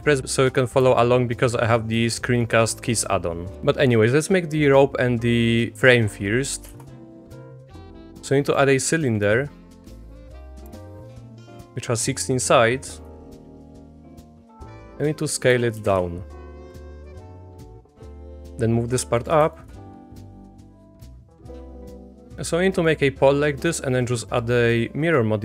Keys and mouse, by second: 1.7-2.1 shift+middle drag, 2.2 shift+middle drag, 6.7 shift+a, 9.2 middle click, 9.9 click, 13.1 s, 13.9 s, 15.5 s, 17.5 Tab, 17.6 click, 17.8 ctrl+z, 18.1 g, 20.7 s, 21.8 a, 22.2 click, 22.7 click, 23.7 click, 24.4-25.4 drag.